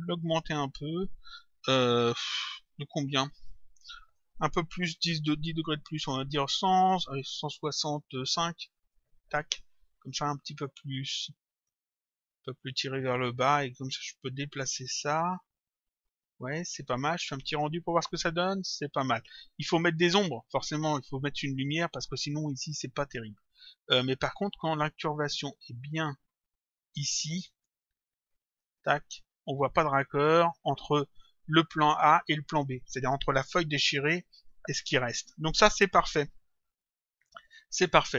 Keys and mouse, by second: 4.1 click, 8.8 click, 11.5 click, 13.6 click, 17.4 click, 23.8 click, 25.0 click, 26.3 click, 28.5 click, 37.4 click.